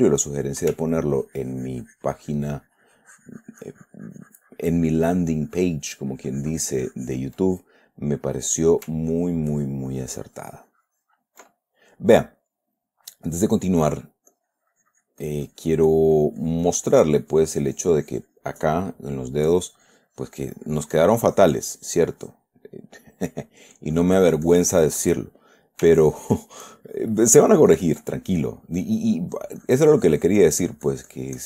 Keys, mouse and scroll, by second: 1.3-7.8 ctrl+drag, 7.8 ctrl+middle click, 8.6 ctrl+middle click, 9.5-11.8 ctrl+drag, 11.8-14.2 ctrl+middle drag, 14.7-19.0 drag, 19.8-22.9 drag, 22.9 middle click, 24.3-25.6 drag, 25.6 middle click, 26.4-28.4 ctrl+drag, 28.4 ctrl+middle click, 29.4 ctrl+middle click, 30.0-31.4 drag.